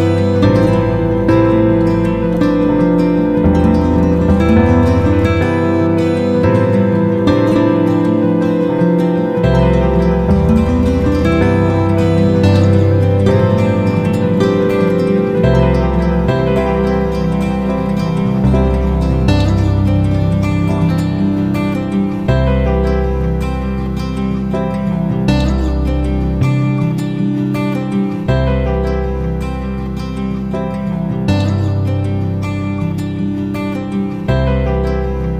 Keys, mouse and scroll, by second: 1.5 click, 4.0-4.9 typing, 5.4 Return, 8.3-16.3 drag, 19.8 Right, 19.9 Right, 20.9 Left, 23.6 click, 30.1 ctrl+g, 32.4-35.3 drag.